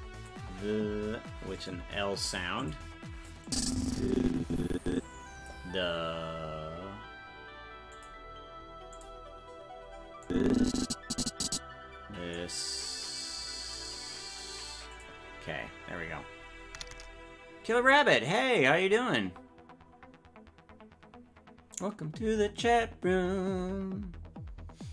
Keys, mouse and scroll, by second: 2.6 click, 3.5-5.5 drag, 7.9 click, 8.9 click, 10.3-12.3 drag, 13.7 click, 14.9 click.